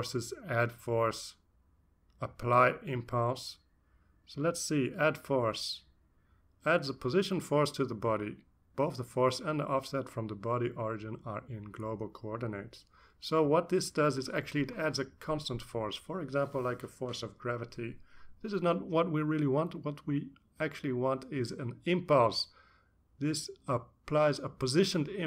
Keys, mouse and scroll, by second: 5.0 click, 6.6-8.3 drag, 9.1-10.6 drag, 11.6-12.6 drag, 21.0-25.2 drag.